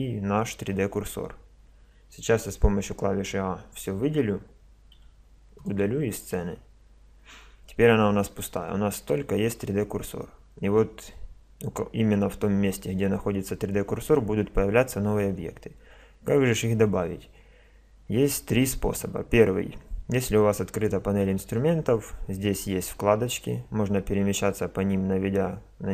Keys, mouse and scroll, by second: 3.2 a, 3.5 a, 5.0 x.